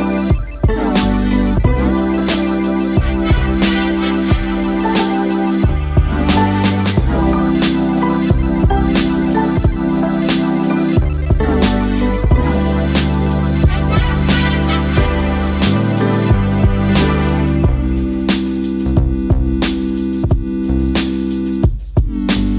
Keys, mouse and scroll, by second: 0.0-0.5 typing, 0.6 click, 1.9-2.5 alt+scroll up 1, 2.7-5.7 drag, 9.0 right click, 10.9-22.5 drag.